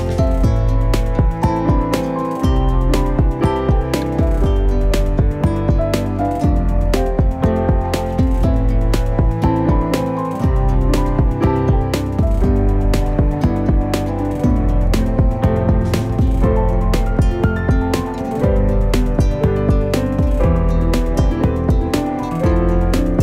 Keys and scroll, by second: 1.5 x, 2.0 ctrl+z, 2.4 g, 3.8 s, 4.2 Escape, 4.6 s, 5.3 s, 6.1 s, 7.3 g, 7.4 x, 16.3 x, 17.9 8, 19.0 g, 19.3 y, 21.5 shift+d, 21.7 y.